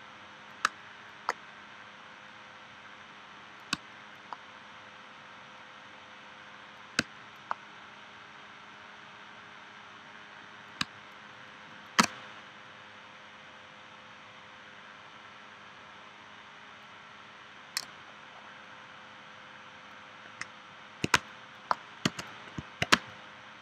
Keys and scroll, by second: 0.7 space, 3.8 space, 7.0 space, 10.8 space, 21.2 space, 22.1 v, 22.9 space.